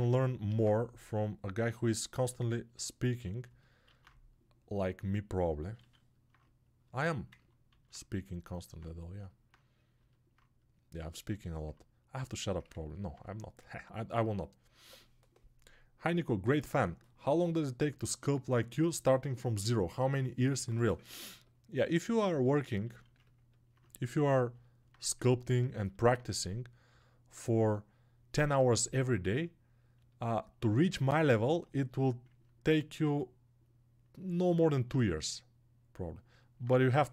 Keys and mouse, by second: 7.8-23.1 drag, 23.6-24.8 drag, 26.0-37.1 alt+drag.